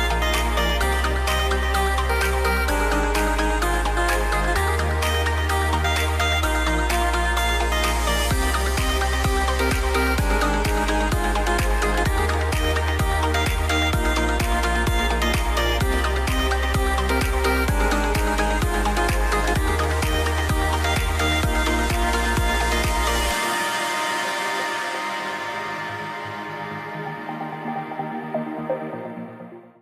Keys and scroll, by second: 0.0 shift+m, 8.1 super+z, 13.0 shift+Right, 13.3 super+z, 14.2 shift+Right.